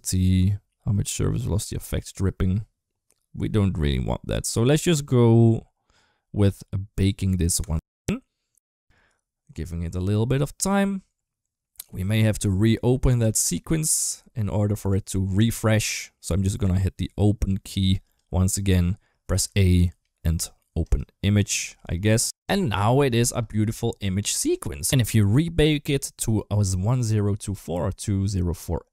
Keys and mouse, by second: 7.4-13.5 drag, 14.6 click, 15.2 click, 17.9 click, 21.8 space, 23.0 space.